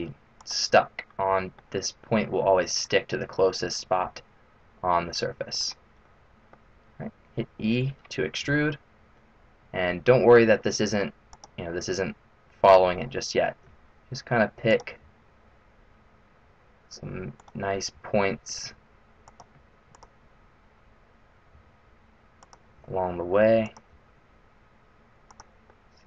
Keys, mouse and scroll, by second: 0.7 middle click, 4.0 g, 6.1 middle click, 8.4 e, 13.5 e, 15.0 e, 17.9 e, 19.8 click, 21.5 e, 22.7 e, 23.8 e, 25.6 middle click.